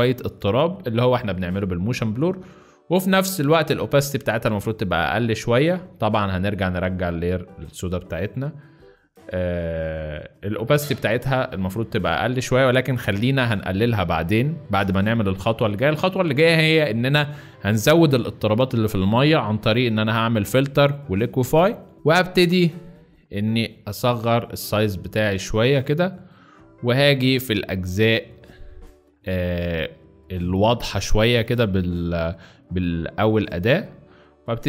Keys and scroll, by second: 13.8 z, 14.7 space, 26.1 z, 27.8 z, 29.5 alt+space, 31.1 alt+b.